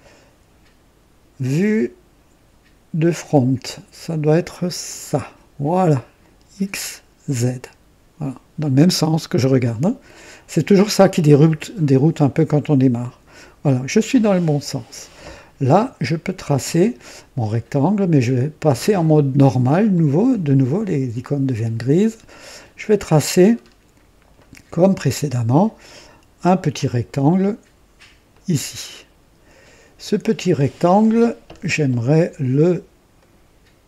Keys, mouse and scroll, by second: 4.8 click, 12.9 click, 14.4-14.9 scroll up 1, 15.3-16.1 right drag, 19.9 click, 22.5 click, 23.5-23.8 scroll up 1, 24.3 right click, 26.8 click, 28.2 click, 31.1 scroll up 1, 33.1 right click.